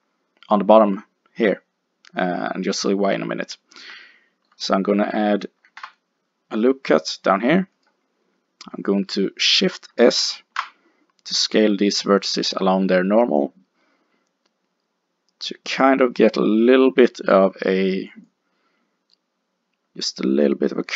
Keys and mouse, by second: 3.4 middle click, 4.0-5.7 middle drag, 5.7 ctrl+r, 10.3 alt+s, 18.3 click.